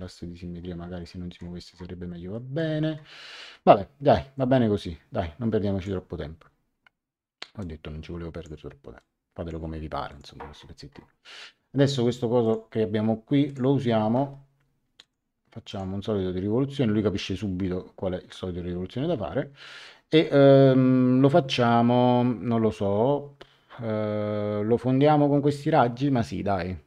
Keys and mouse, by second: 1.0 middle click, 2.0 middle click, 4.3 click, 7.5 click, 8.9 click, 10.0 click, 12.4 click, 13.4 click, 15.0 click.